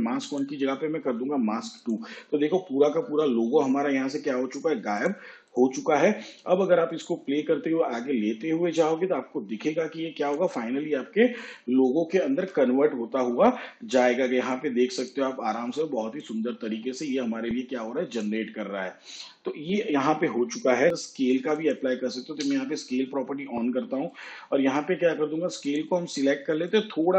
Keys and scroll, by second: 12.4 shift+/, 22.5 s.